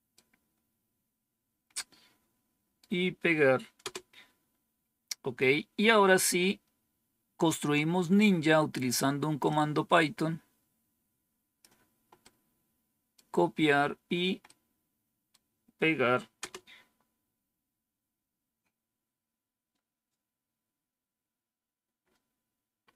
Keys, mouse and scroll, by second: 1.6-2.7 right drag, 3.7 Return, 5.8-6.5 scroll down 1, 9.4-11.5 drag, 12.1 right click, 14.3 right click, 16.3 Return.